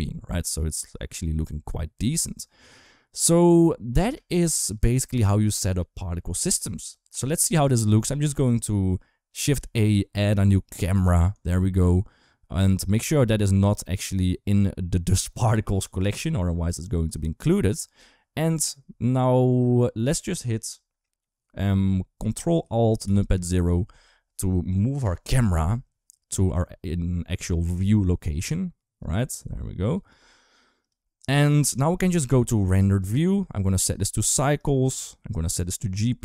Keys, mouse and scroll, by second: 0.1 ctrl+s, 3.8 space, 4.1 click, 9.4 shift+a, 15.4 click, 22.8 ctrl+alt+KP_0, 27.4 r, 29.1 g, 29.8 r, 31.6 shift+middle drag, 32.7 click, 33.5 click, 34.0 click.